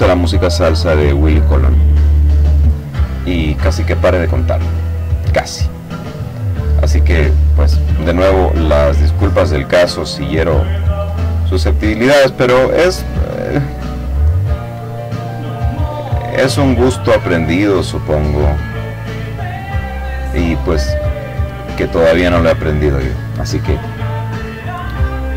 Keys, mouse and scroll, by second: 2.0 click, 2.5 middle click, 3.3 click, 6.5 click, 7.1-8.2 drag, 8.3 click, 10.4 click, 12.0 click, 13.2 click, 14.0-15.8 drag, 16.0 click, 16.6 click, 18.0-20.8 middle drag, 23.6 click, 25.0 click.